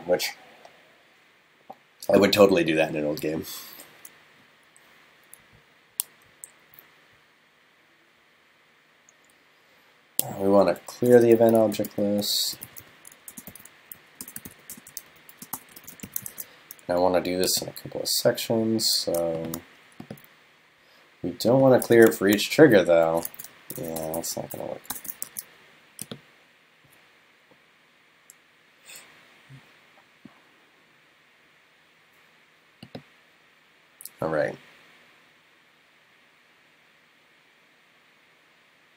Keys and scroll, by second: 16.3 super+s, 22.3 shift+super+Left, 23.3 super+x, 25.3 super+s.